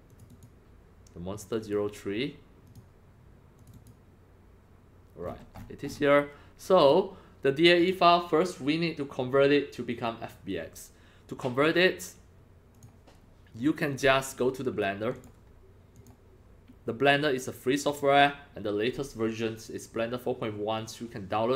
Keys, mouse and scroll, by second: 0.1 click, 0.3 click, 1.6 click, 2.6 click, 3.6 click, 3.7 click, 5.2-6.5 scroll up 17, 6.8 click, 7.8 click, 12.7 click, 13.9 click, 15.1 click, 15.9 click, 17.9 click.